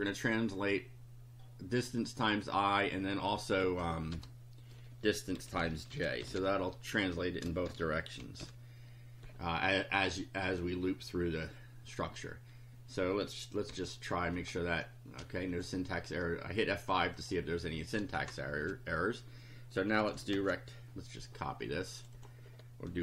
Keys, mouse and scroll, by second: 1.8 click, 2.7 click, 3.6 Left, 4.2-8.4 typing, 13.6 F5, 14.4 click, 14.8 scroll up 2, 15.5 click, 17.2 click, 18.2 Return, 19.8-20.9 typing, 22.0 click.